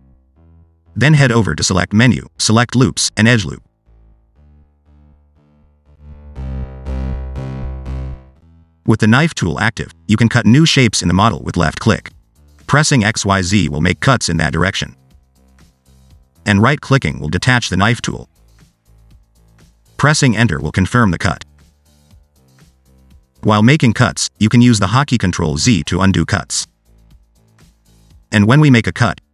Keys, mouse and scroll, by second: 1.1 click, 4.1 middle click, 9.7 click, 12.3 click, 22.6 middle click, 23.7 ctrl+z, 24.4 middle click, 24.6 click, 28.8 click.